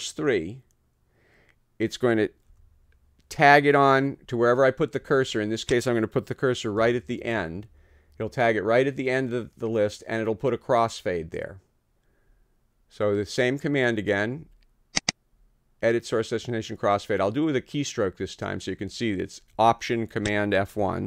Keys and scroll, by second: 2.5 d, 6.8 n.